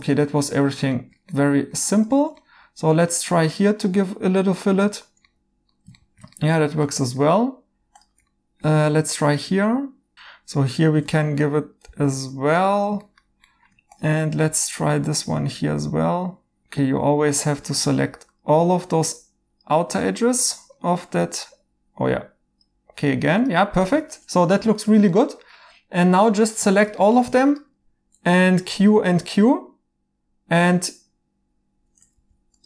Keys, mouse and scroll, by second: 2.5 2, 5.3 right click, 8.3 right click, 9.9-10.6 typing, 10.1 right click, 13.1 alt+h, 16.6 Escape, 23.9 Tab, 24.8 right click, 28.3 q, 28.7 q, 32.1 ctrl+z.